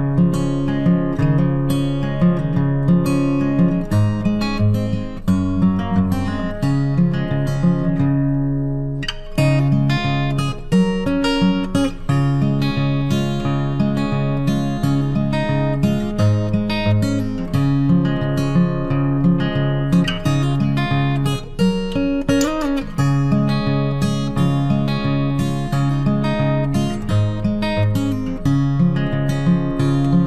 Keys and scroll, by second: 16.6 ctrl+t, 28.2 ctrl+t.